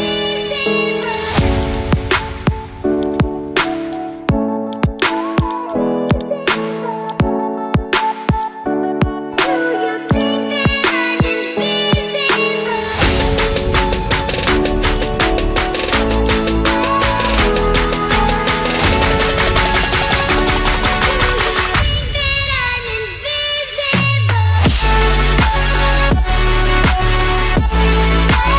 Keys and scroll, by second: 27.4 ctrl+alt+shift+e.